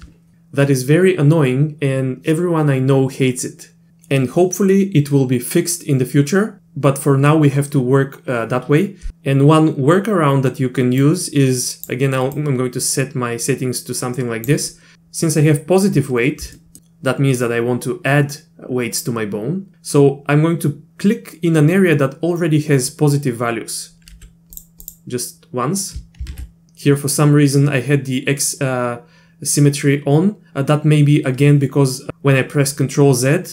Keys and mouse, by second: 11.1 click, 12.4-14.5 drag, 16.6 shift+middle click, 24.1 f, 24.8 click, 26.3 ctrl+z.